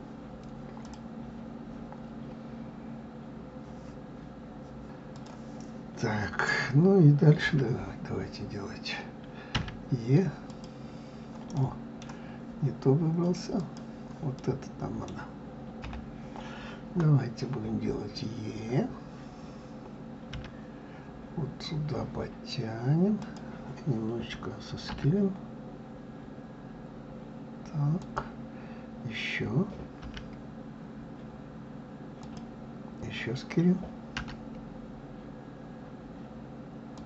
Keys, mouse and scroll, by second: 10.9 click, 11.9-14.0 middle drag, 14.0 click, 14.7-16.2 middle drag, 16.2 KP_3.